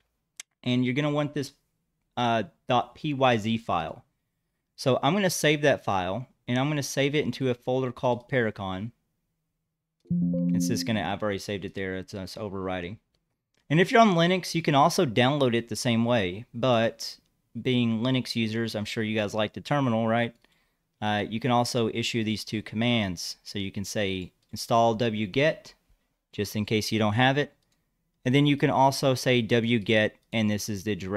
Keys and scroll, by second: 25.3-27.3 typing.